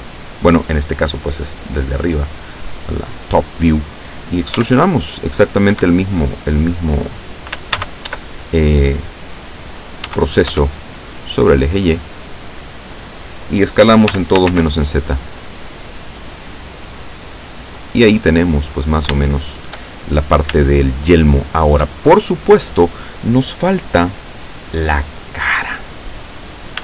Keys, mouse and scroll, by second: 4.6 e, 5.8 Escape, 7.9 ctrl+z, 10.1 e, 10.6 y, 13.0 click, 14.2 s, 14.5 shift+z, 17.9 click, 18.4 scroll down 2, 19.3 shift+middle click, 20.1-20.6 shift+scroll up 3, 20.9-22.1 shift+middle drag.